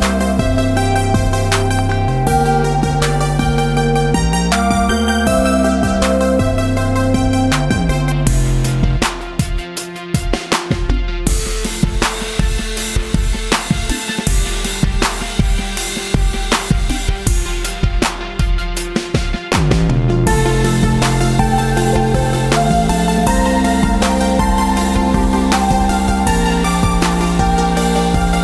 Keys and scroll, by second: 5.5 Tab.